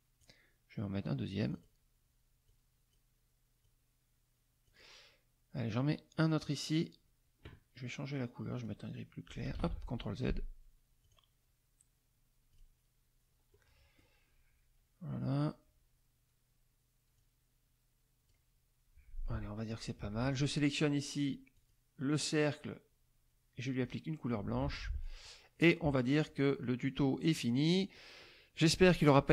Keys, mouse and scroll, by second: 1.4 click, 2.4 click, 3.6-4.8 drag, 6.2 click, 8.5 click, 9.5 ctrl+z, 11.0 click, 12.5 click, 13.5 middle click, 17.1-18.5 drag, 19.2 F1, 19.7 click, 20.1 F2, 21.5 click, 23.8 click, 24.6 F1, 25.0 click, 25.8 KP_Subtract, 26.6 middle click, 27.2 middle click, 28.2 click.